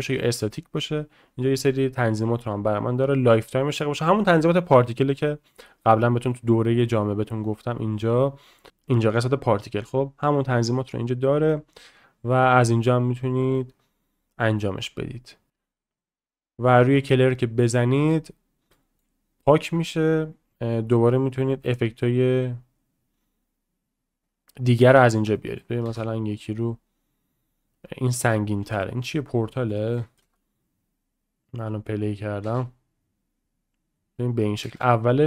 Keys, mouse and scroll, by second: 7.4 click, 15.9 click, 18.7 middle drag, 19.4 shift+middle drag, 20.0-22.3 drag, 23.5 click, 24.9 shift+middle drag, 25.4 middle drag, 25.9 space, 30.0 shift+middle click, 30.6-31.7 scroll up 1, 30.6 space, 31.7 middle click, 32.0-33.1 scroll down 1, 33.1-34.0 scroll down 1, 34.0-34.6 scroll down 1, 34.6-35.1 scroll down 1, 35.1 click.